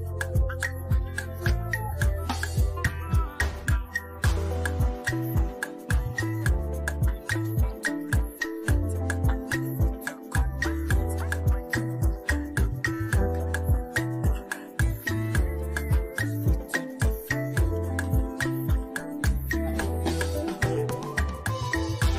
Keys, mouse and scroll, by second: 4.9 F10, 7.5 click, 7.6-13.1 drag, 13.1 ctrl+c, 13.9 click, 14.7 ctrl+v, 15.6 click, 18.2 Return, 20.5 shift+7.